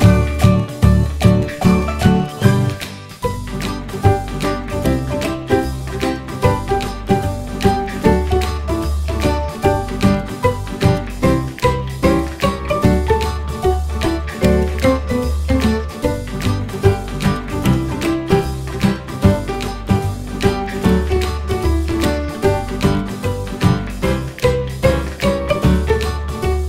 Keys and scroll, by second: 2.9 ctrl+u, 20.1 ctrl+g.